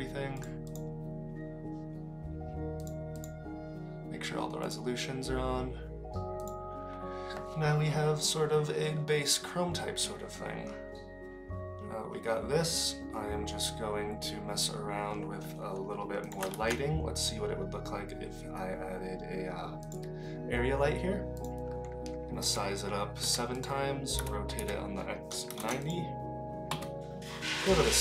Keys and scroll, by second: 16.5 shift+a, 22.4 s, 24.2 r, 26.7 KP_3.